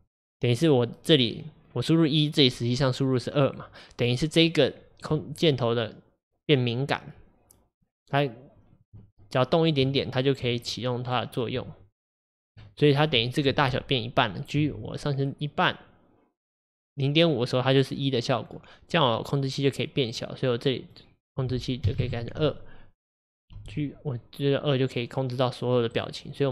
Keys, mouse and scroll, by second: 12.5 Tab, 13.2 click, 14.6 g, 22.0-23.6 drag, 23.6 g, 26.4 click.